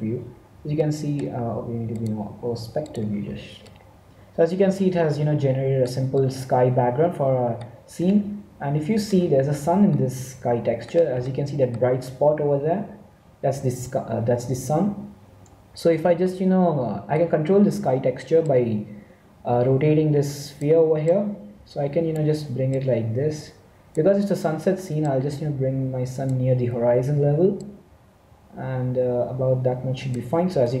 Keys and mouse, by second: 3.8-14.9 middle drag, 16.2-18.5 middle drag, 18.5-20.3 drag, 21.2 click, 24.2 click, 25.0-26.8 drag, 27.5-29.4 drag, 30.7-30.8 middle drag.